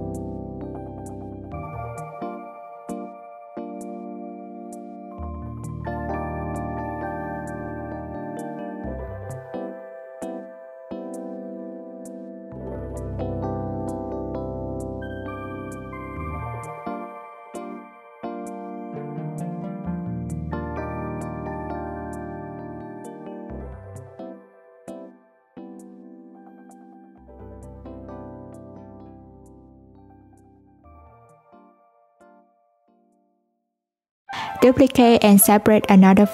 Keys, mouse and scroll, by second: 0.1 click, 2.2 ], 3.0 Tab, 3.9 click, 5.4 click, 8.0 Tab, 9.3 Tab, 10.9 click, 12.6 click, 15.0 2, 15.7 click, 17.7 s, 20.8 Tab, 21.6 alt+z, 22.7 click, 23.4 click, 23.8-25.6 scroll down 1, 25.6 click, 27.5 click, 27.7-30.7 drag, 34.2 click, 34.6 Tab, 35.4 3, 35.6 click.